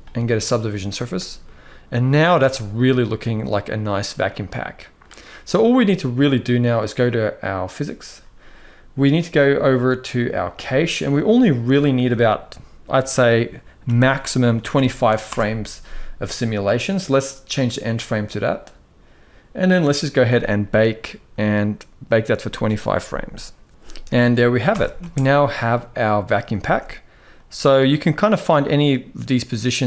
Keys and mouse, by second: 1.2-2.1 middle drag, 2.7-4.7 middle drag, 7.4 click, 10.2 click, 11.5-15.0 drag, 20.0-25.5 drag, 24.4 shift+Left, 24.7 space, 26.3 space, 27.0-29.8 drag.